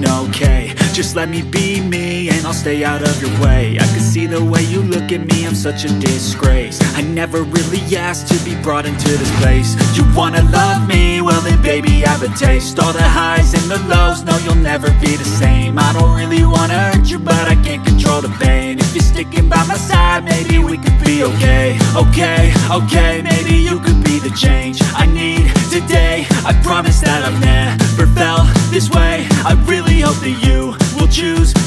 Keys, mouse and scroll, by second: 0.5 click, 2.9 right click, 4.0 click, 6.0-8.6 alt+shift+drag, 11.7-31.6 shift+drag.